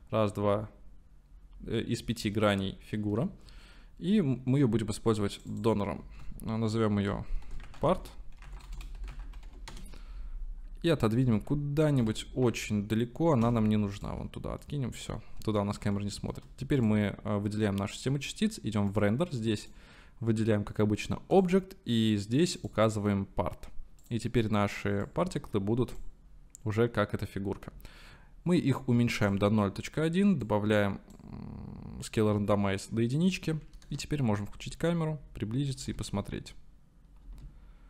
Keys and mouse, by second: 1.8 click, 1.9-2.4 middle drag, 2.7-3.3 shift+middle drag, 4.2-4.7 middle drag, 5.6-8.5 drag, 11.2-12.0 middle drag, 12.0 g, 12.1 y, 12.8 x, 14.0 click, 14.6-15.2 middle drag, 16.0 shift+middle click, 19.8-21.5 drag, 22.6-24.1 drag, 25.0-26.1 drag, 28.8 click, 30.5 click, 33.8 KP_0, 35.8 space.